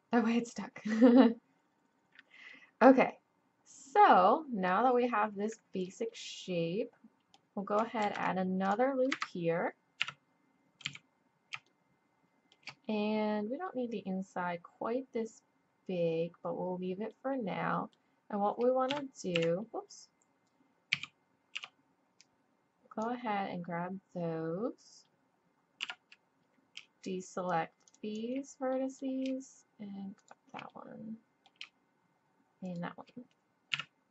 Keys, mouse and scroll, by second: 2.5-4.6 middle drag, 5.5-8.0 middle drag, 8.0 ctrl+r, 10.0 KP_1, 10.8 z, 11.2 click, 17.1-18.9 drag, 18.9 KP_3, 19.3 KP_1, 20.9 z, 21.5 b, 25.8 b, 27.9 click, 33.7 KP_1.